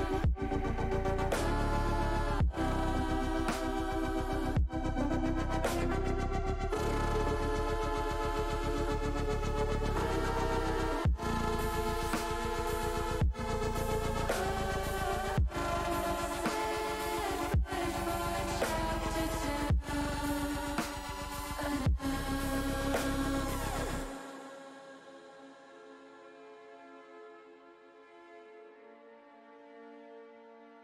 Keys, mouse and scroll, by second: 0.0 s, 0.8 click, 1.0 ctrl+z, 1.3 middle click, 2.6 shift+middle click, 3.3 middle click, 4.9 s, 5.5 click, 9.1 shift+click, 10.3 middle click, 12.0 ctrl+alt+click, 13.0 ctrl+z, 13.4 ctrl+z, 17.9 shift+middle click, 19.3 middle click, 21.4 middle click, 23.0 shift+click, 23.7 shift+click, 24.2 middle click, 26.4 shift+click, 27.2 middle click, 27.3 middle click, 27.8 middle click, 28.5 middle click, 30.1 s.